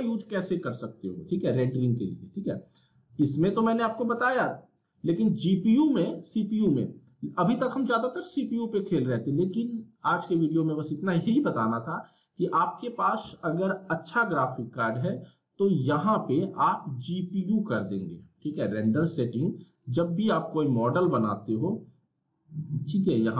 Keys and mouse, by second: 3.1 click, 9.0 click, 19.3 click.